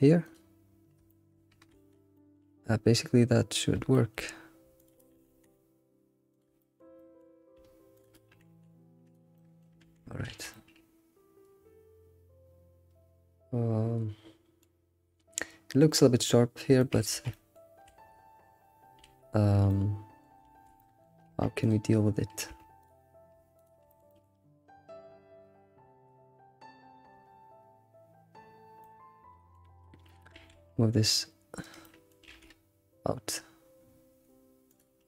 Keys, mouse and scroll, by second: 0.6-1.1 scroll down 3, 1.1 shift+middle click, 1.7 alt+x, 2.1 middle click, 2.5 alt+x, 3.9 shift+middle click, 4.2-4.8 scroll up 3, 4.8 alt+click, 5.1 g, 6.6 shift+middle click, 7.9 alt+click, 8.3 g, 9.4 middle click, 9.8 ctrl+s, 10.0 scroll down 2, 10.3 alt+shift+z, 10.5-13.5 middle drag, 16.5-16.8 scroll up 2, 16.8 shift+middle click, 17.1 alt+shift+z, 17.3 middle click, 17.7 scroll up 2, 17.9 alt+shift+z, 19.0 alt+shift+z, 19.7-20.5 middle drag, 20.5 alt+x, 20.8 middle click, 20.9 middle click, 21.3 Tab, 21.6 click, 22.5 Tab, 22.8 click, 23.6 ctrl+click, 24.1 alt+middle click, 28.8-30.3 middle drag, 30.3 alt+s, 31.8 middle click.